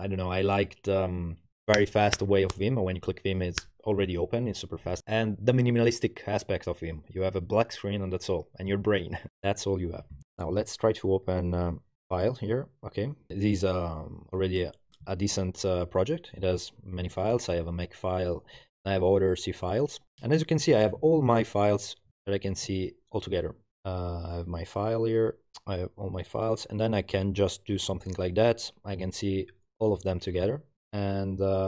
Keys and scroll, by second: 10.2 ctrl+alt+Left, 15.2 super++, 20.7 super+-.